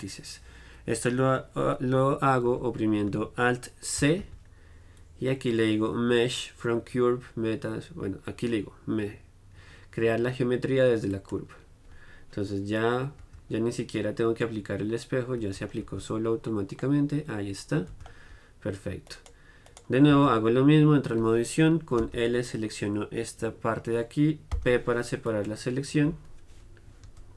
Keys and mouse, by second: 0.4-2.6 middle drag, 2.6 z, 4.2 alt+c, 13.4 Tab, 15.6 Tab, 16.0 Tab, 16.0-19.2 middle drag, 18.1 Tab, 19.2-22.2 right drag, 20.3 Tab, 22.2 l, 24.7 p, 27.2 Tab.